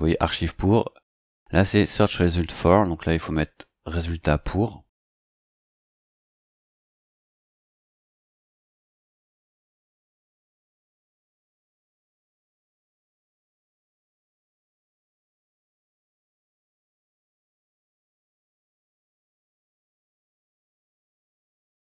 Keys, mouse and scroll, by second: 4.3-5.4 drag, 6.8-9.5 typing, 10.5-11.9 typing, 13.8 scroll down 2, 16.3 click, 17.9 click, 19.4-21.9 typing.